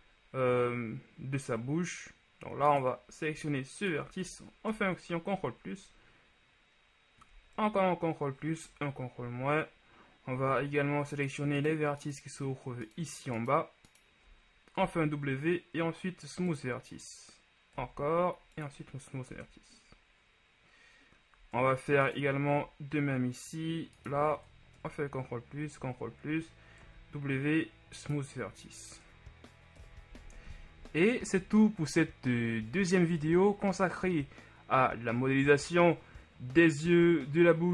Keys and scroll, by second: 4.9 ctrl+shift+KP_Add, 7.8 ctrl+KP_Add, 8.8 ctrl+KP_Subtract, 15.0 shift+w, 18.0 w, 19.5 Tab, 25.0 ctrl+shift+KP_Add, 25.7 ctrl+KP_Add, 27.0 w, 29.1 Tab, 30.1 KP_1.